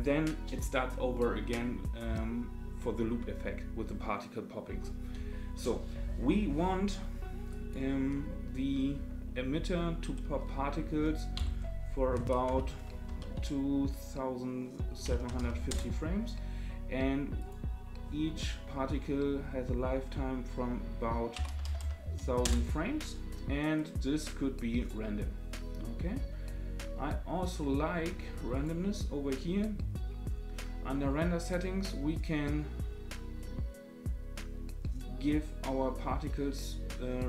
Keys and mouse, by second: 7.5-16.3 drag, 17.5-23.0 drag, 21.6 KP_0, 21.8 KP_0, 23.8-24.9 drag, 28.5 click, 32.1-37.2 drag.